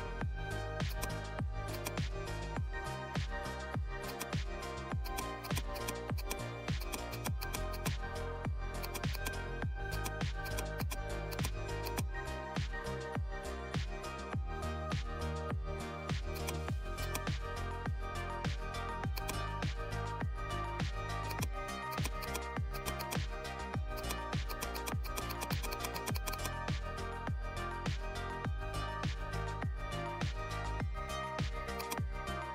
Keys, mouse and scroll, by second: 4.0-10.4 drag, 10.4 click, 16.2 click, 16.3-19.1 drag, 20.0 right click, 21.2 click, 30.0-30.3 alt+scroll up 3, 30.6 alt+scroll down 1, 30.8 alt+scroll up 1, 31.7-32.5 drag.